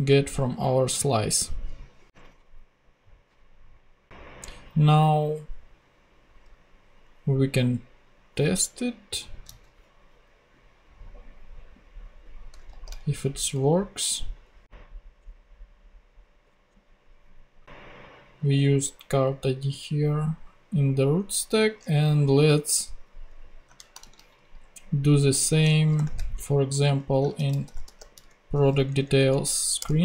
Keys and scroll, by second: 2.2 ctrl+Tab, 12.7 shift+super+f, 13.0 shift+super+v, 13.9 super+v, 15.1 Down, 16.4 Up, 17.0 Return, 23.7 shift+super+Left, 24.0 shift+super+c, 25.0 super+c, 25.9 shift+super+o, 27.1-28.6 typing, 28.9 Down, 29.8 Return.